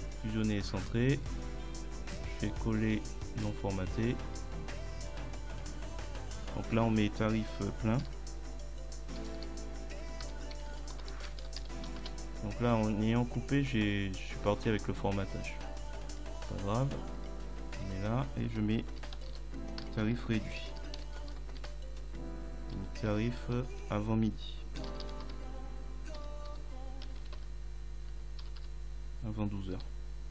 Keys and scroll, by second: 8.0 t, 9.4-11.6 typing, 12.0 Return, 19.0 t, 20.2 space, 20.6 r, 21.0 d, 21.6 t, 22.8 Delete, 23.8 a, 25.3 t, 25.4 space, 26.2 m, 27.1 Delete, 28.1 space, 28.5 1, 28.6 2.